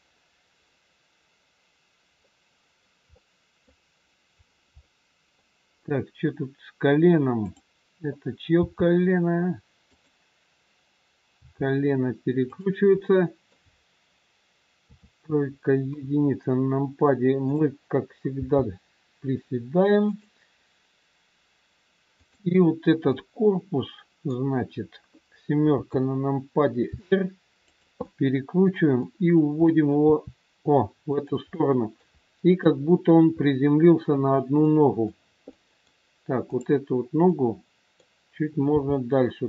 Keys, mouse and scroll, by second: 0.6 scroll up 1, 2.2 middle click, 2.2 scroll up 1, 3.8 middle click, 4.4 scroll down 2, 4.8 middle click, 6.2-7.4 scroll up 3, 7.4 click, 8.5 g, 11.3 g, 12.9 middle click, 14.8 KP_3, 16.0 KP_1, 16.6-17.3 scroll down 1, 17.3 click, 18.3 g, 22.1 click, 23.1 middle click, 25.7 KP_7, 26.9 r, 28.0 middle click, 29.0 middle click, 29.0 scroll up 1, 29.9 middle click, 29.9 r, 31.5 middle click, 32.0 scroll down 1, 32.7 middle click, 33.4-34.2 scroll down 1, 34.6 middle click, 35.6 middle click, 36.4 click, 37.3 middle click, 38.7 g.